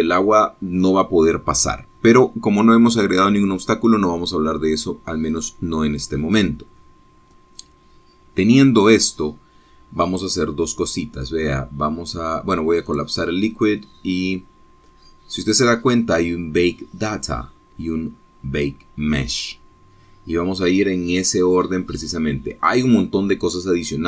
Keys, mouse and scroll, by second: 6.7 click, 10.4-11.2 scroll down 3, 11.3-11.7 scroll up 1, 14.2 click, 17.0-17.4 scroll up 1, 18.7-19.1 scroll down 2, 23.3-24.0 scroll down 2.